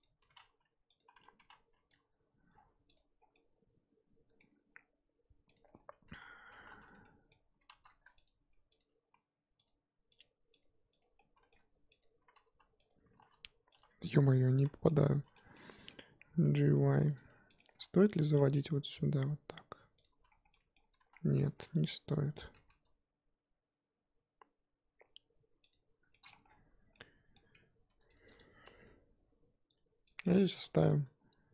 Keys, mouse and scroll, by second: 0.2 s, 1.3 s, 1.9 Tab, 2.5-2.9 scroll down 2, 2.9 click, 3.2 scroll down 2, 3.3-4.5 middle drag, 4.5-5.5 scroll up 7, 5.5 click, 5.7 scroll up 2, 5.8 Tab, 6.5 z, 6.9 click, 7.0-7.7 middle drag, 7.7 3, 8.2 click, 8.8 click, 9.7 z, 10.2 click, 10.6 click, 11.2 middle click, 12.0 click, 13.2 1, 14.1 click, 14.6 z, 14.8 scroll down 1, 14.8-15.5 middle drag, 15.5 scroll down 1, 15.5-16.2 middle drag, 16.2 g, 17.6-18.6 middle drag, 18.6 g, 20.2 z, 20.5-21.0 middle drag, 21.0 ctrl+z, 21.6 middle click, 22.5 g, 26.1-26.4 middle drag, 26.4-26.9 scroll down 6, 26.9-27.9 middle drag, 27.9 Tab, 28.1 click, 28.6 g, 30.1 click, 30.2-30.6 middle drag, 30.6 scroll up 1, 30.9 click, 31.0 Tab.